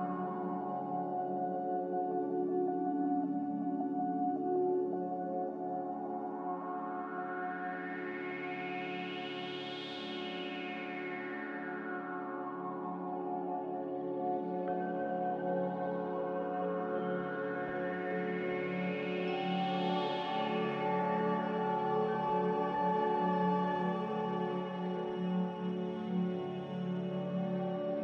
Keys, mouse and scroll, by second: 2.2 x, 5.2 z, 7.7-9.2 typing, 11.3 n, 12.2 a, 13.8 f, 19.6 z, 21.4-22.6 typing, 24.1 ctrl+z, 27.5-28.0 typing.